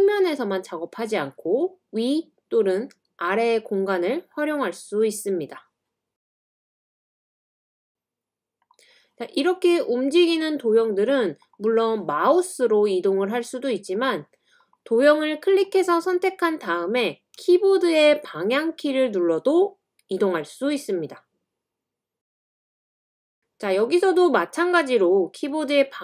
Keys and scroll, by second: 17.4-18.2 Left, 20.8-21.6 Up, 22.3 scroll up 1, 25.5-26.0 typing.